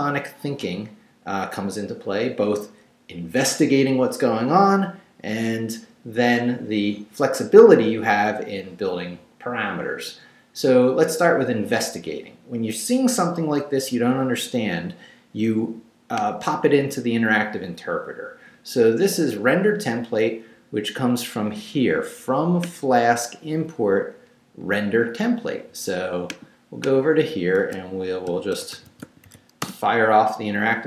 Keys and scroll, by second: 28.3-29.8 typing.